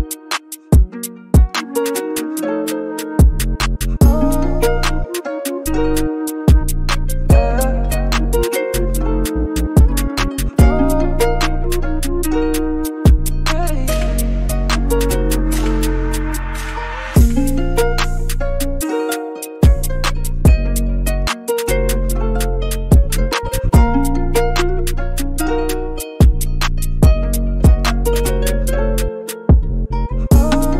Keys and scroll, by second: 0.5 b, 6.4 [, 6.4 [, 6.4 [, 22.8 super+g, 23.0-24.8 typing.